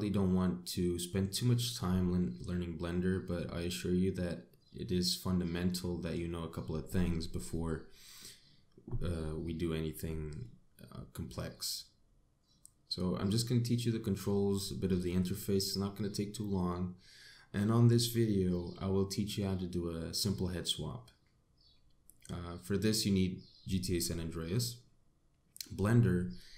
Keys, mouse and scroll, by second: 1.4-2.0 scroll up 1, 2.3 middle click, 5.5 middle click, 10.3 middle click, 21.5-22.0 scroll down 1, 22.1 middle click.